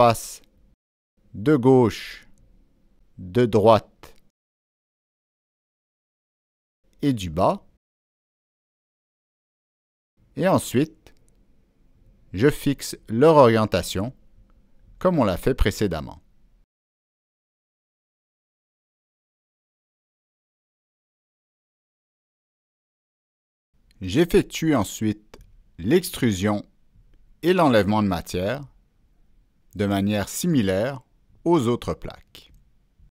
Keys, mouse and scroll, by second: 1.1 Escape, 3.3-5.4 drag, 7.0-9.3 drag, 11.2-13.3 drag, 14.3 click, 15.4 click, 16.6 click, 17.5 click, 18.8 click, 20.2 click, 21.4 click, 22.4 click, 26.3 click, 29.4 click, 32.5 click.